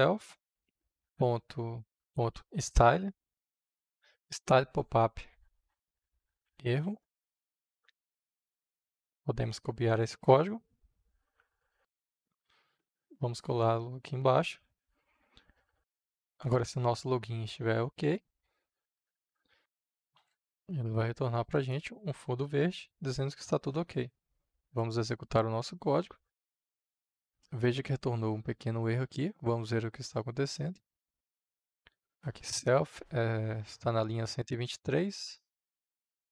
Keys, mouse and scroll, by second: 0.0-1.0 typing, 2.0 Return, 2.0-3.3 typing, 6.4 Down, 6.9 Return, 8.5-9.9 drag, 10.4 ctrl+c, 11.5-12.6 drag, 12.6 Return, 14.3 ctrl+v, 16.2-19.8 drag, 20.0 shift+o, 20.3 k, 21.4 click, 22.3 ctrl+s, 24.5-26.3 drag, 26.3 F5, 26.5-36.2 drag.